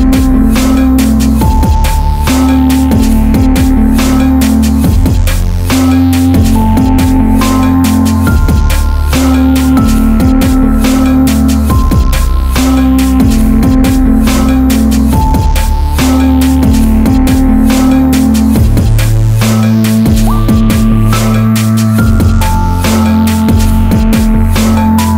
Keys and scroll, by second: 15.5 alt+z, 19.5 ctrl++, 21.0 alt+z, 21.7 ctrl++, 22.5 alt+s.